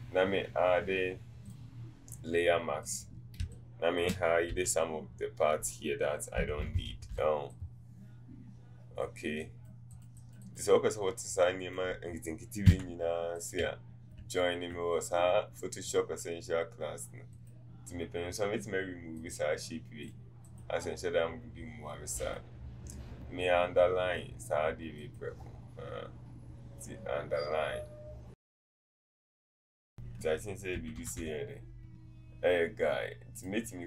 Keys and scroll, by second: 3.5 space, 12.7 v, 31.2 Up.